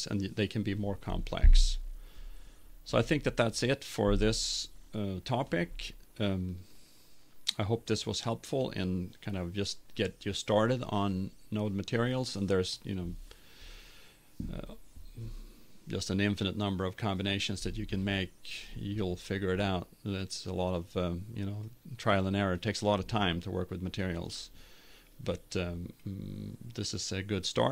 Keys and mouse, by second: 2.6-4.7 drag, 5.1-6.4 middle drag.